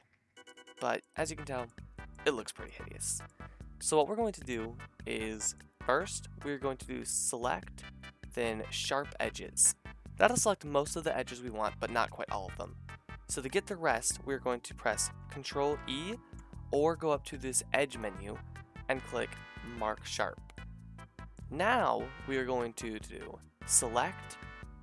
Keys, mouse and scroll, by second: 2.1-4.4 middle drag, 4.4-9.8 drag, 9.9-11.3 middle drag, 15.8 ctrl+e.